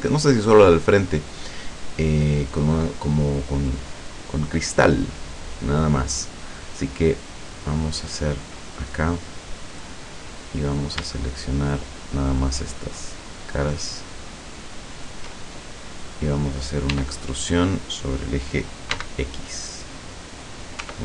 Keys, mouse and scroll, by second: 8.2 click, 10.5 middle click, 11.7 shift+right click, 12.5 shift+right click, 13.0 shift+right click, 13.7 shift+right click, 14.4 shift+right click, 14.9 shift+right click, 15.7 shift+scroll down 3, 16.9 e, 18.9 x, 20.5 click, 20.9 Tab.